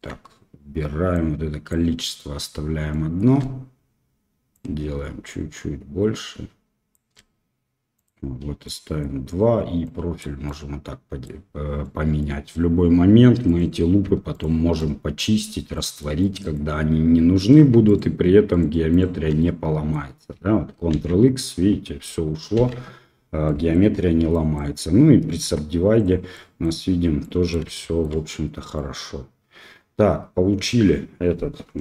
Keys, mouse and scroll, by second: 1.2 click, 2.9 middle click, 4.5-7.0 shift+drag, 7.9 click, 8.6 middle click, 9.9 click, 10.4 middle click, 11.8 middle click, 13.4 click, 14.3 alt+click, 14.7 alt+middle click, 15.7 middle click, 16.1 middle click, 17.8 alt+shift+click, 18.5 alt+shift+click, 18.9 alt+shift+click, 19.3 middle click, 20.9 ctrl+x, 23.4 middle click, 23.9 Tab, 24.3 drag, 25.4 q, 26.3 middle drag, 27.2-27.5 middle drag, 27.7-28.0 shift+middle drag, 28.7-31.8 middle drag.